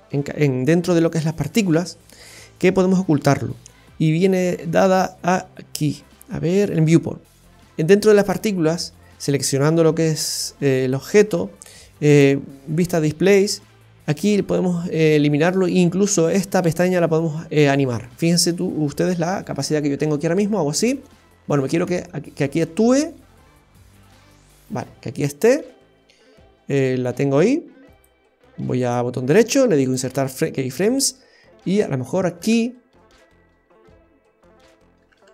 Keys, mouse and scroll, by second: 0.1-0.6 scroll down 1, 1.6-1.9 scroll down 1, 2.1-2.5 scroll down 8, 3.8-4.6 scroll down 7, 12.1 click, 12.6 scroll down 1, 13.1-13.6 scroll down 7, 19.5-20.2 Right, 20.4 Right, 20.5 Right, 20.9 Left, 21.0 Left, 21.4 Right, 21.8 Left, 24.0 Right, 24.6 Left, 28.8 right click, 31.8 Right, 32.0 Right, 32.2 Right, 32.5 Right, 34.9-35.3 Right.